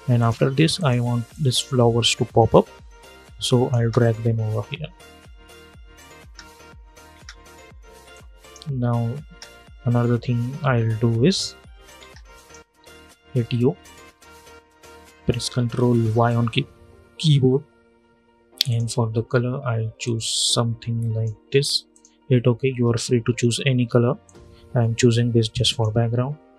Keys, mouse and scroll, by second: 0.0-3.5 drag, 3.5 space, 5.6 space, 7.8 click, 9.0 space, 11.7 space, 12.1 click, 13.1 u, 13.9 u, 14.1 scroll down 1, 15.8 ctrl+y, 18.4-21.6 drag, 22.4 Return, 24.0-26.5 drag.